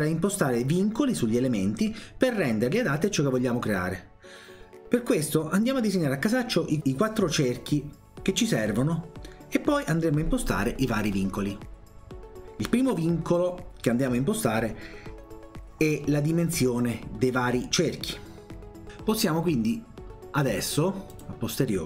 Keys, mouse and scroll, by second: 5.2 click, 5.9 click, 6.7 click, 7.3 click, 8.0 click, 8.9 click, 9.6 click, 10.9 click, 21.2 click.